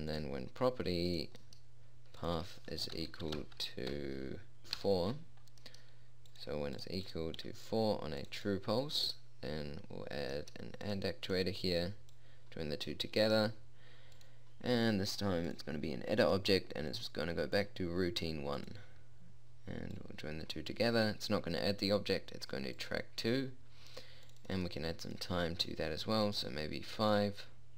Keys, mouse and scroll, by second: 11.4-16.9 drag, 17.5-19.3 drag, 26.1 click.